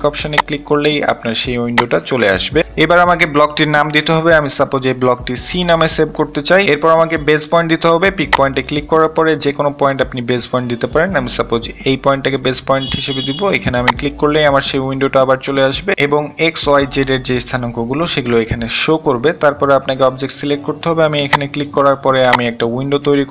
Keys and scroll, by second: 4.9 c.